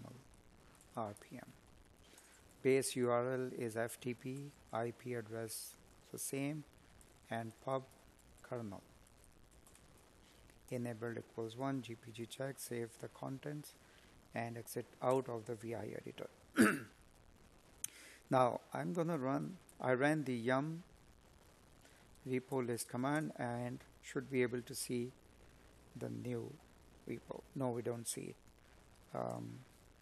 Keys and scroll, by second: 2.1 Escape, 7.9 Escape, 17.9 space.